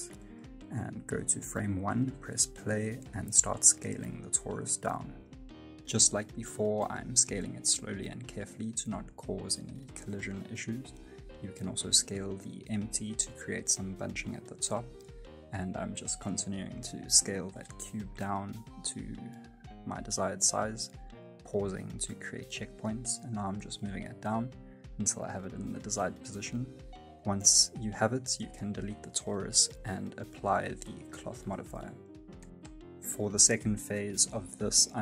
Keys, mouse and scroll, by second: 0.8 s, 6.6 right click, 7.1 right click, 7.6 right click, 7.6 s, 9.9 right click, 10.2 s, 19.1 space, 19.2 middle click, 19.4-19.8 scroll up 3, 19.5 middle click, 19.8 space, 20.7 g, 26.3 space, 26.6 scroll down 2, 26.7 middle click, 26.9 scroll up 1, 27.1 shift+middle click, 27.2 middle click, 27.4 middle click, 27.5 F9, 28.1 right click, 28.6 right click, 28.9 x, 30.0 right click, 31.2 click, 32.7 click, 32.8 shift+middle click, 33.2 middle click, 33.8 shift+middle click, 34.1-34.4 scroll up 1, 34.4 Tab, 34.8 shift+middle click.